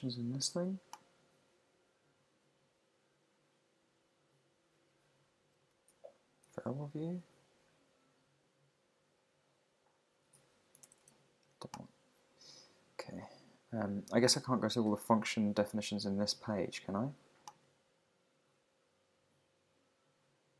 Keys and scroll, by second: 6.4 shift+8, 11.0 alt+BackSpace.